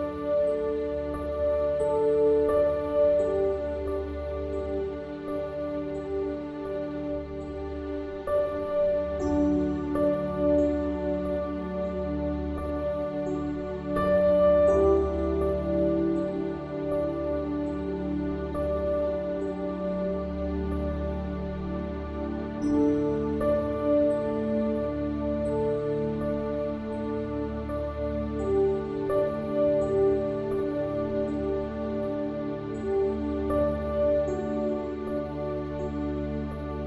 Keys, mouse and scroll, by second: 1.4 a, 2.0 a, 2.7-3.7 middle drag, 3.9 KP_1, 5.4 middle click, 6.5-9.0 middle drag, 8.1 shift+d, 10.0 r, 16.4-18.7 drag, 20.8-29.3 drag, 29.6-33.7 drag, 31.3 ctrl+e, 36.1-36.8 middle drag.